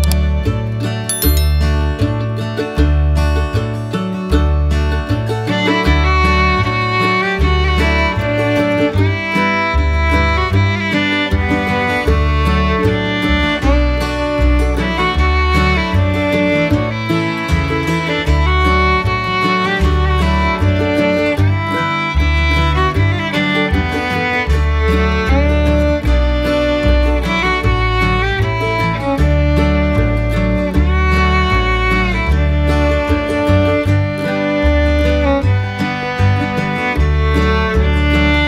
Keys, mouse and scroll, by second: 3.4 middle click, 4.1-4.4 middle drag, 4.6 middle click, 5.1 shift+middle click, 5.4 middle click, 5.9 shift+middle click, 7.7 shift+middle click, 9.8 middle click, 10.6 middle click, 11.6 shift+middle click, 13.5 click, 14.1 middle click, 15.9 click, 19.0 click, 20.6 middle click, 21.9 middle click, 22.9 middle click, 25.3 click, 26.3 click, 33.6 click.